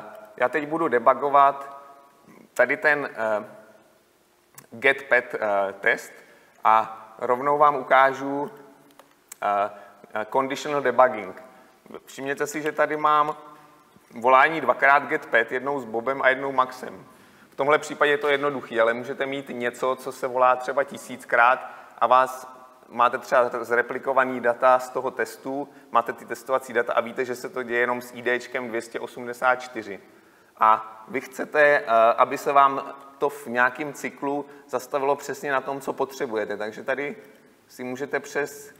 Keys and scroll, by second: 8.7 ctrl+b, 9.1 ctrl+b, 12.7 ctrl+alt+Left, 32.5 ctrl+b, 33.0 ctrl+b, 37.6 ctrl+F8.